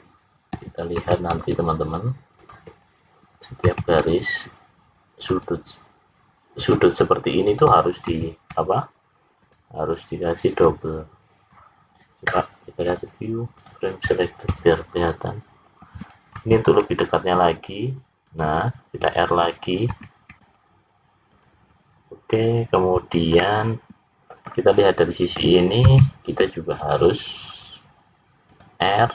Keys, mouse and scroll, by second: 0.9 ctrl+r, 3.6 ctrl+r, 8.0 ctrl+r, 12.7 click, 16.3 ctrl+r, 19.9 ctrl+r, 23.3 middle click, 25.8 ctrl+r.